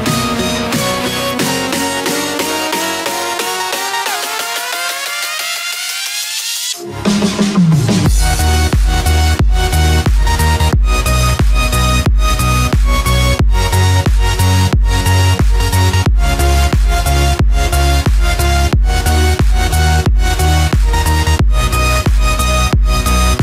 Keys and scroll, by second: 0.3 ctrl+=, 0.9 ctrl+space, 1.5 ctrl+=.